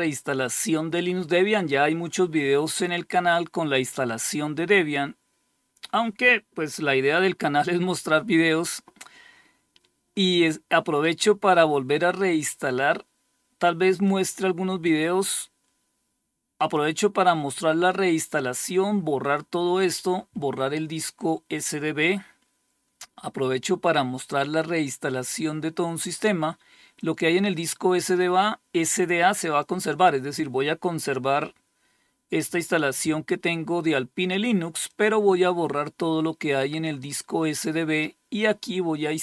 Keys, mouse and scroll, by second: 13.5-16.2 drag, 26.4-29.0 drag, 34.3-37.0 drag.